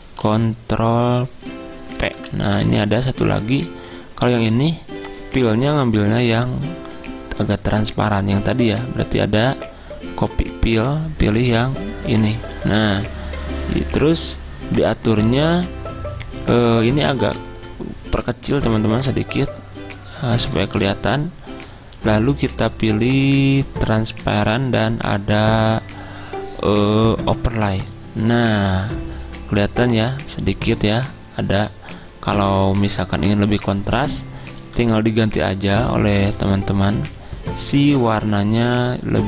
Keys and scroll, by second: 2.1 ctrl+v, 3.3 ctrl+z.